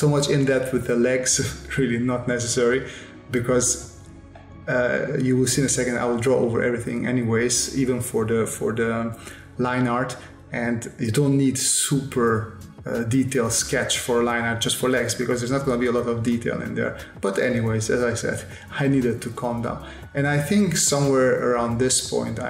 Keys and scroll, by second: 3.8 space, 6.3 space, 8.0 space, 8.3 s, 10.7 s, 11.5 space, 12.7 s, 14.1 space, 14.9 s, 16.4 space, 19.1 s, 21.6 s.